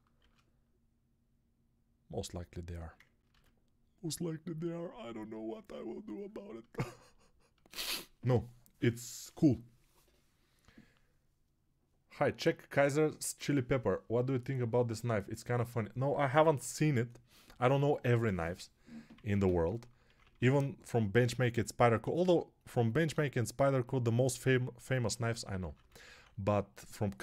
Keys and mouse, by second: 0.0 shift+r, 3.6 ctrl+r, 19.2-20.4 typing, 24.7-26.0 typing.